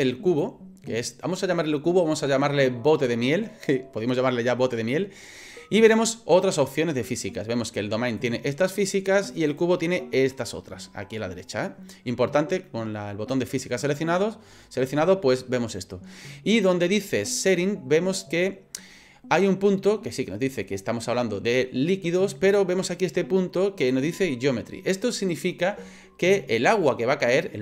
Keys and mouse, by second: 0.3 right click, 8.2 right click, 9.5 right click.